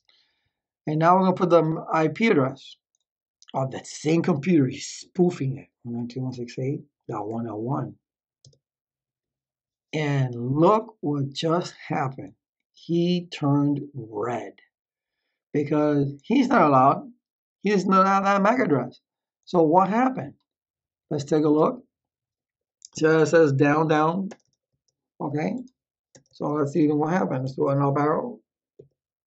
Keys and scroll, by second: 4.4-7.9 typing, 8.3 Tab, 24.2 Return, 26.0 Return, 27.7 Up.